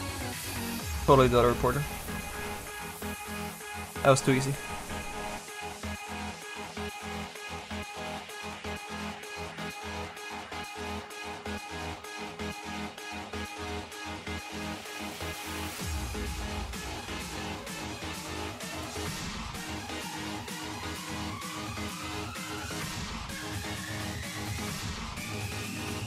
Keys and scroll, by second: 17.3 s, 19.5 ctrl+z.